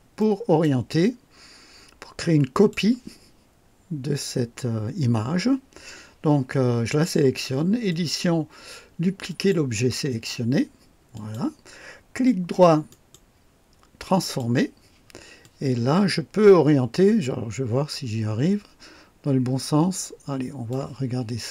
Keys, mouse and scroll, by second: 0.1-0.7 right drag, 2.4 click, 7.8 click, 9.2 click, 11.0 click, 12.8 right click, 14.1 click, 15.3-20.8 drag.